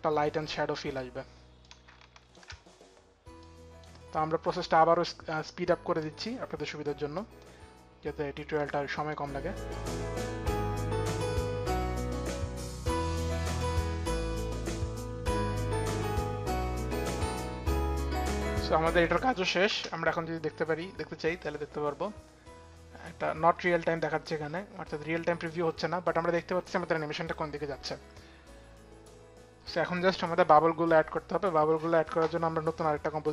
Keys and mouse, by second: 1.2 click, 1.5 shift+click, 6.3 click, 8.3 click, 9.9 click, 10.2 click, 10.3 click, 10.5 click, 10.8 click, 10.9 click, 11.0 click, 11.1 click, 11.9 click, 12.3 k, 12.5 click, 12.6 click, 12.7 click, 12.8 click, 13.6 click, 13.7 click, 13.8 click, 14.0 click, 14.3-15.7 typing, 14.3 click, 14.7 click, 14.9 click, 15.2 ctrl+z, 15.5 click, 15.8 click, 16.0 click, 16.1 click, 16.5 click, 16.9 click, 17.3 k, 17.5 click, 17.7 click, 17.8 k, 18.0 click, 18.3 k, 18.5 click, 19.3 click, 19.3 k, 19.3 space, 22.4 space.